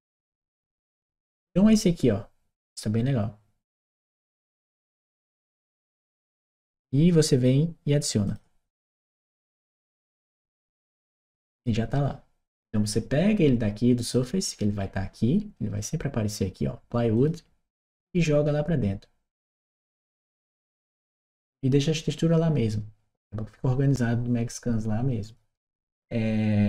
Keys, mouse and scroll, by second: 3.7 click, 8.0 click, 11.2 click, 14.0 click, 16.9 click, 19.9-26.6 drag.